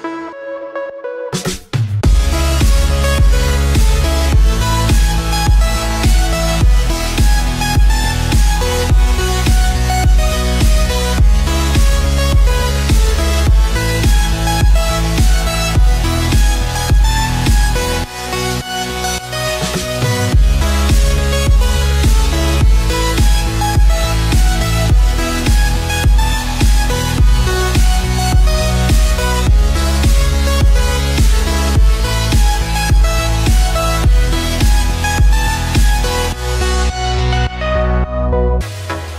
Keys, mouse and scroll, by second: 0.1 click, 0.7-2.1 scroll down 1, 2.1 click, 2.8 shift+click, 3.4 Tab, 3.8 click, 5.9 z, 7.1 click, 7.6 b, 11.0-14.7 drag, 18.6 click, 19.5 b, 21.8-25.5 drag, 27.8 Tab, 28.3 click, 28.7 z, 29.6 click, 30.1-33.5 middle drag, 33.5 click, 34.8 shift+click, 35.7 shift+click.